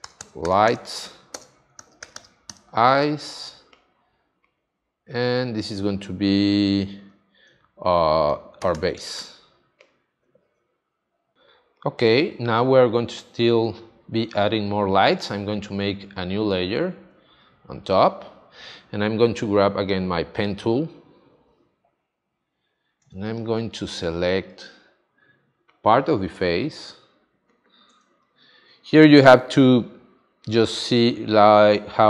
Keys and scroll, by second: 0.0-0.2 typing, 1.3 space, 1.7 shift+e, 2.0 y, 8.4-9.2 typing, 11.3 space, 23.1 space, 28.0 space.